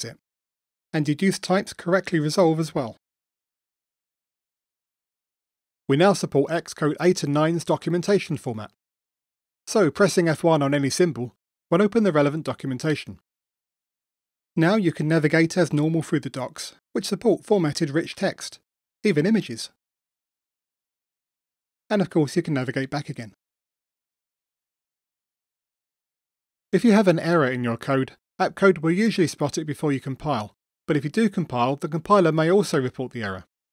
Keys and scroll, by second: 2.8 Return, 3.3 shift+super+Return, 11.7 F1, 32.5 super+F9.